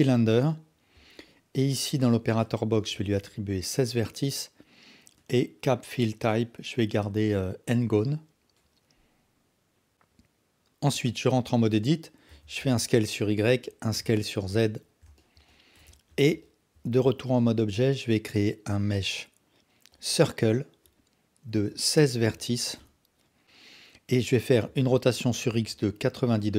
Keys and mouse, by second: 1.9-5.2 drag, 6.0-8.3 drag, 10.9 Tab, 12.3 s, 13.9 s, 15.6 alt+click, 15.9 Tab, 16.4 alt+click, 17.4 shift+a, 21.5-22.8 drag, 24.6 r.